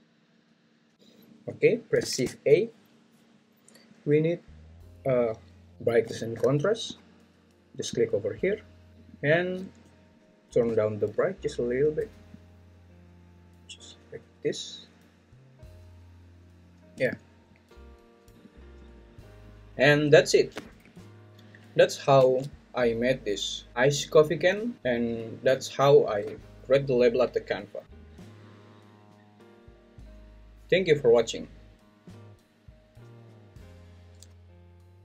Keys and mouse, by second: 11.2-16.9 drag.